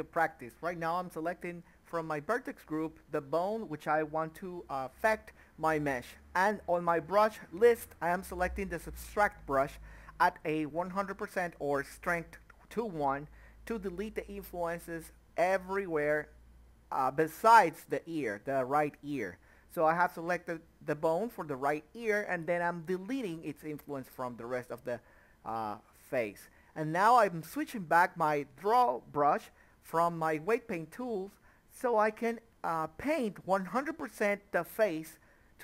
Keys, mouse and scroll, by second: 0.2 drag, 0.7-5.3 drag, 9.1 middle click, 9.6-12.4 drag, 12.4 middle click, 12.9-14.9 drag, 16.4 scroll down 1, 16.5 middle click, 17.0-18.9 drag, 19.8 middle click, 20.7-22.1 drag, 22.1 middle click, 22.4 click, 22.7 ctrl+middle click, 23.3 click, 24.1 middle click, 24.4 click, 25.6 middle click, 25.7 click, 26.5 click, 26.7 middle click, 26.8 click, 27.1 middle click, 27.2 click, 27.6 middle click, 27.7 click, 28.4 middle click, 28.6 click, 29.7 middle click, 29.8 click, 31.6 middle click, 32.2 click, 32.9 middle click, 34.2 KP_1, 34.9 Tab.